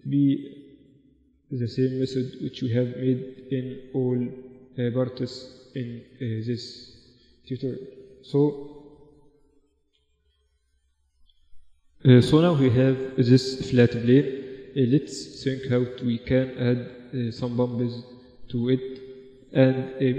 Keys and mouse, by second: 0.1-3.0 drag, 0.1 g, 1.4 g, 6.2 Tab, 6.4-8.8 drag, 6.6 Tab, 7.5 Tab, 9.6 z, 10.6-12.4 drag, 12.4 middle click, 13.4 z, 13.9-15.3 middle drag.